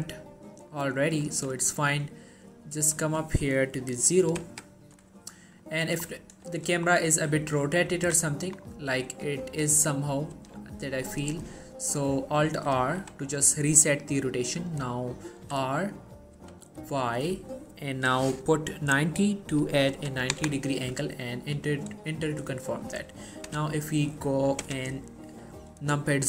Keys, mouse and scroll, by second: 5.3-5.8 scroll down 1, 5.8 middle click, 6.2-6.6 scroll down 1, 6.7 shift+middle click, 7.7-8.1 scroll down 1, 8.1 3, 8.7-9.2 scroll up 1, 9.2 r, 9.9 right click, 10.5 r, 11.3 ctrl+right click, 11.6 scroll down 1, 11.7 middle click, 12.9 alt+r, 13.3 middle click, 15.5-16.5 typing, 21.6 middle click.